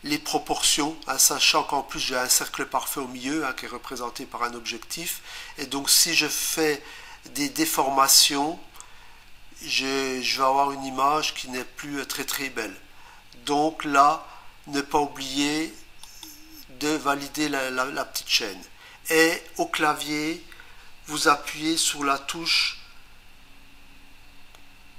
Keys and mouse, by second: 16.0 click.